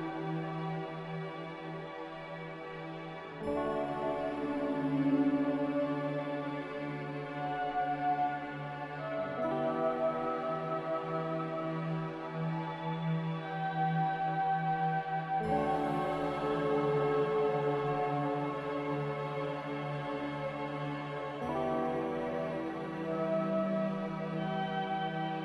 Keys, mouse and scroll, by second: 3.8 n, 16.0 b.